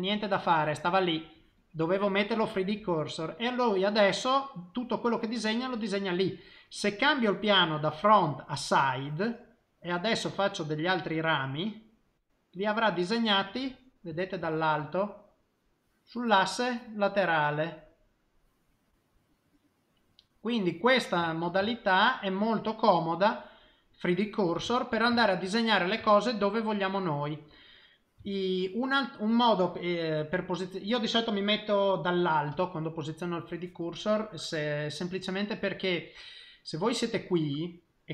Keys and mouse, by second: 1.6 click, 2.9 middle click, 4.1 middle click, 4.7 middle click, 5.6 middle click, 7.2 click, 9.0 middle click, 9.9 click, 10.4 click, 10.9 click, 11.5 click, 12.0 click, 12.5 middle click, 14.4 shift+middle click, 14.9 middle click, 21.3 ctrl+middle click, 21.6 shift+middle click, 22.1 middle click, 23.5 middle click, 24.7 ctrl+middle click, 25.0 ctrl+middle click, 25.1 shift+middle click, 25.5 middle click, 26.0 shift+middle click, 26.5 middle click, 28.2 shift+middle click, 32.5 KP_7, 35.8 middle click.